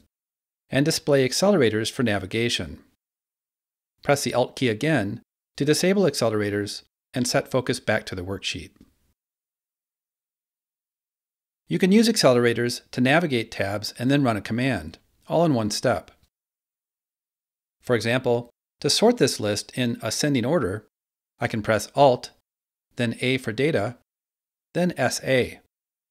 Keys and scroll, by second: 22.3 alt+a, 24.6-25.3 typing.